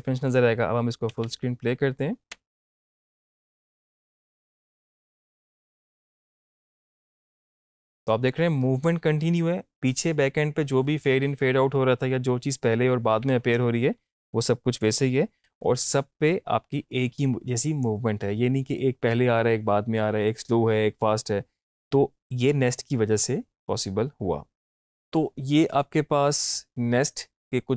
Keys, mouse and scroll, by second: 2.3 space, 14.0 space, 14.4-17.9 drag.